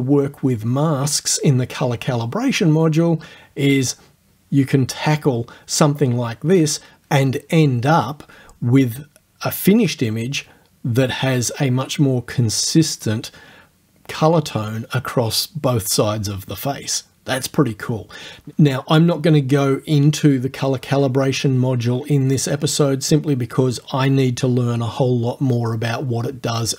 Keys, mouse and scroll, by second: 10.0-10.6 scroll up 2, 10.6 click, 12.2 ctrl+click, 13.1-14.5 drag, 19.6-20.8 drag, 25.1 click.